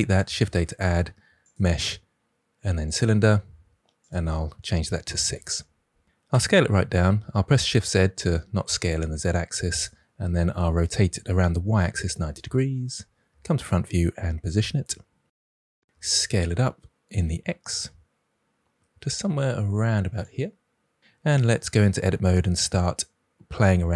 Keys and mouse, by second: 0.2 shift+a, 4.1-5.3 drag, 6.2 s, 6.9 shift+z, 9.7 drag, 10.8 r, 11.6 y, 12.0 9, 12.0 0, 12.3 Return, 13.2 KP_1, 13.7 g, 15.8 s, 17.2 x, 20.2 click, 21.6 Tab, 22.5 ctrl+r.